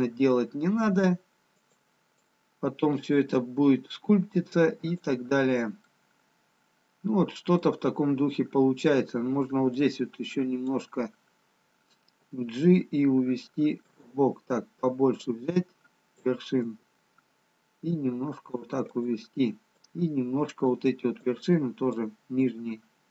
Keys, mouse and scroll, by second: 2.4 click, 3.6 g, 6.7 middle click, 8.6-10.0 scroll down 1, 10.0 click, 13.7 g, 15.3 click, 16.8 g, 20.1 click, 21.5 click, 22.5 g.